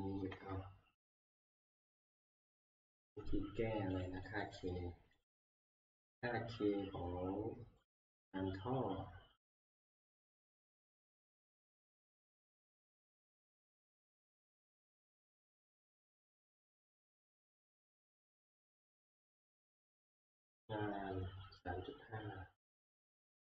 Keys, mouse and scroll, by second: 0.4 ctrl+Tab, 0.4 click, 4.0 click, 4.3 click, 4.5 click, 5.2 click, 6.6 scroll, 7.9 click, 10.0 click, 12.2 click, 18.7 click, 19.3 scroll, 23.0 click.